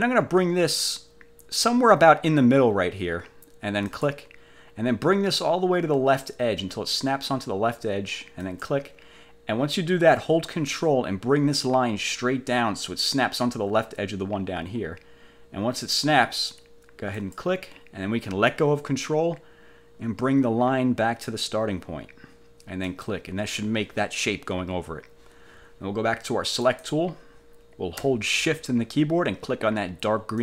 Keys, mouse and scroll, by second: 4.0 click, 8.6 click, 17.3 ctrl+click, 23.0 click, 26.8 click.